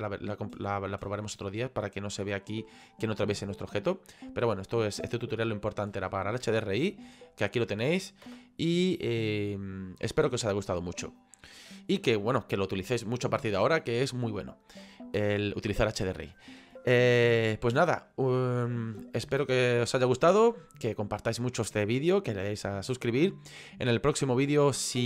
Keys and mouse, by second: 2.3 middle click, 3.7 middle click.